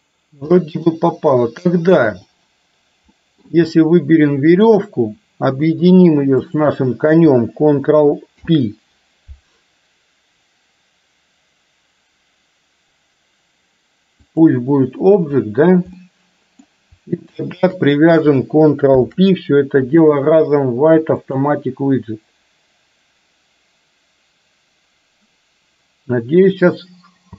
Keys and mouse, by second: 0.6 middle click, 2.4 click, 3.1-3.6 middle drag, 8.4 ctrl+p, 16.1 middle click, 17.5 shift+click, 19.0 ctrl+p.